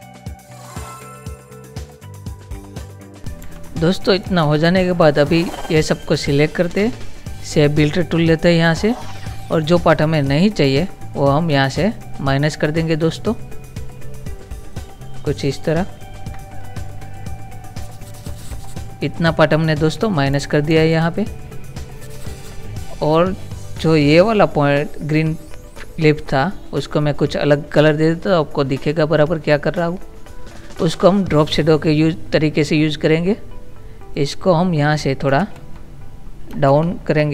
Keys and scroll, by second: 1.6 Down, 2.2 Up, 2.8 Up, 3.6 ctrl+-, 20.6 ctrl+-, 35.6 ctrl++, 36.9 shift+Down.